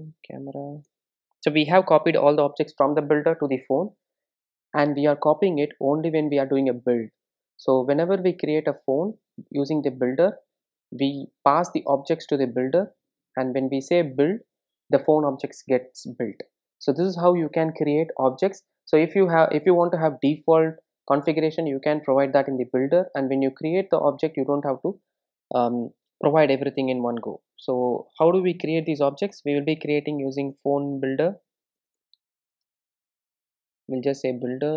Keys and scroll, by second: 2.2 super+s, 32.3 Return.